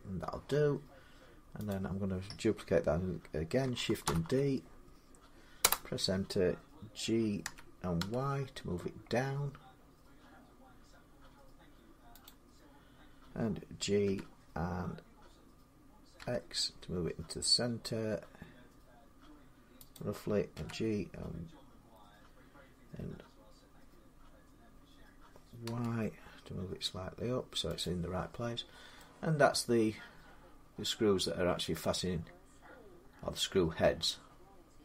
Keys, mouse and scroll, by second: 1.5 click, 3.9 shift+d, 5.4 Return, 7.2-8.5 typing, 8.5 click, 12.1-17.2 drag, 13.8 g, 16.0 x, 19.8-24.8 drag, 20.4 g, 25.5 y, 27.6 click, 28.5-28.8 scroll, 29.7 middle click, 30.7 scroll down 4, 31.3 middle click, 33.6 middle click.